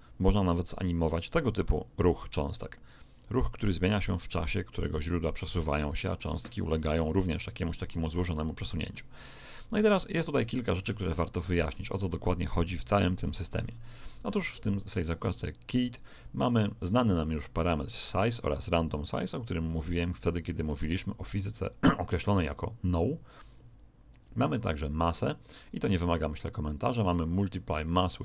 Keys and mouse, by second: 6.1-11.2 middle drag, 13.2 right click, 14.2-21.3 middle drag, 21.3 click, 23.4 click.